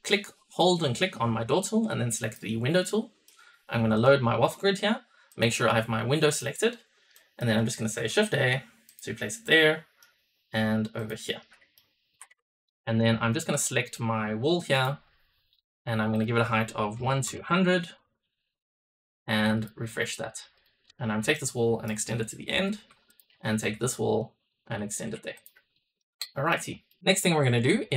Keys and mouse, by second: 2.7-3.2 middle drag, 3.9-6.4 drag, 7.0 middle click, 7.7 shift+a, 9.2-12.4 middle drag, 12.2 Escape, 13.2 click, 14.7 click, 16.1-17.9 drag, 17.3 KP_0, 20.5 click, 21.3-21.8 shift+drag, 22.5 shift+e, 23.0 click, 23.6 shift+click, 24.6 shift+e, 25.3 click, 25.6 middle drag, 26.2 shift+middle click, 26.8 middle click.